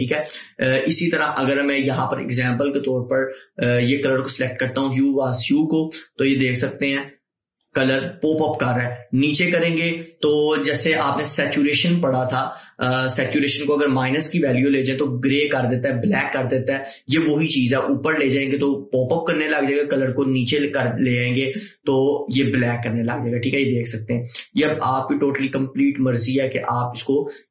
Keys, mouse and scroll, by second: 0.5 scroll down 1, 2.6 click.